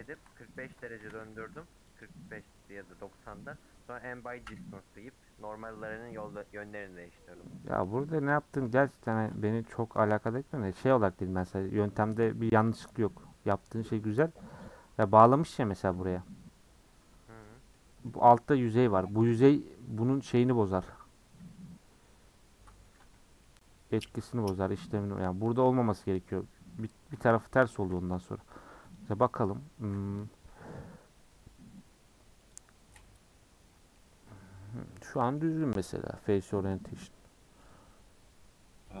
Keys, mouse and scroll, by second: 0.1 alt+shift+click, 1.0 a, 2.0 u, 3.0 scroll down 1, 3.3-7.9 middle drag, 7.9 scroll down 1, 8.1 middle click, 9.0 scroll down 1, 9.2-10.9 middle drag, 10.9-11.4 scroll up 5, 11.4 middle click, 12.3-13.1 scroll down 1, 13.3-14.0 scroll down 3, 14.0 scroll up 4, 14.3-23.0 middle drag, 23.0 scroll down 2, 23.1 Tab, 23.4 middle click, 24.1 Tab, 24.3-24.6 scroll up 1, 24.6-26.1 middle drag, 26.1 scroll down 2, 26.3 Tab, 28.8-33.9 drag, 33.9-36.5 middle drag, 36.5-36.8 scroll down 5, 36.8-39.0 middle drag.